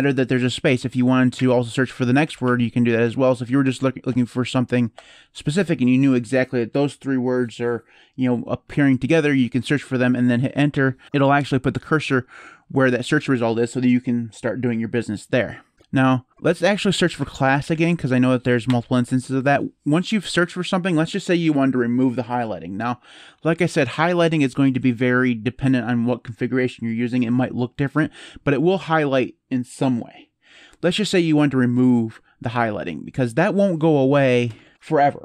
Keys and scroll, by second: 1.1-3.5 typing, 5.0 typing, 10.5 Return, 16.3-18.0 typing, 18.4 Return, 33.7-34.7 typing.